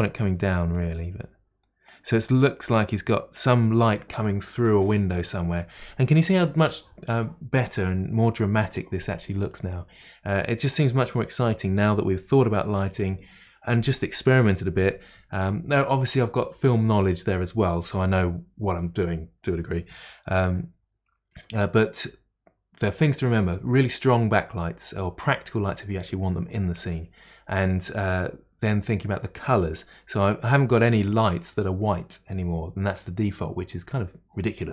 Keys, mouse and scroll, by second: 0.8-5.1 drag.